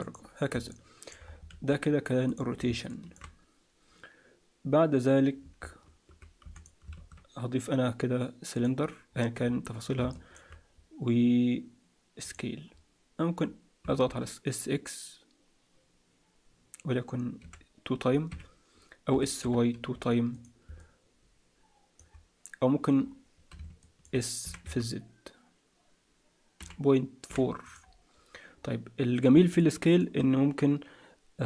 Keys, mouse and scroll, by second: 0.6 middle click, 1.2 scroll down 3, 1.5 alt+a, 1.8-2.2 scroll up 2, 2.2 click, 2.8 shift+middle click, 6.4 x, 6.9 shift+a, 9.0-9.9 scroll up 5, 9.9 scroll up 3, 10.1 shift+middle click, 12.2 click, 12.6-13.2 scroll down 1, 13.2-13.8 scroll down 3, 13.8 s, 19.1 s, 20.8 middle click, 22.6-23.4 scroll down 2, 23.0-23.5 scroll up 4, 23.8 shift+middle click, 24.4 s, 28.1-28.5 scroll down 2, 28.5-29.3 scroll up 1, 29.3 scroll up 1, 29.6 middle click.